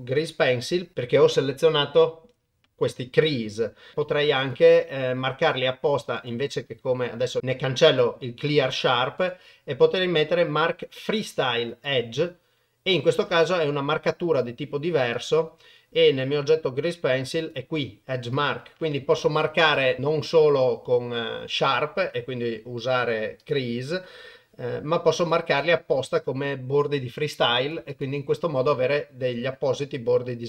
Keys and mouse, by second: 3.9 Tab, 4.0 Tab, 4.8 Tab, 6.2-8.0 right drag, 9.3-11.9 right drag, 13.2 Tab, 17.4 click, 18.4 click, 19.1 click, 19.8 click, 23.0 click, 23.4 click, 25.2 click, 25.6 click, 27.6 click, 27.9-30.4 drag.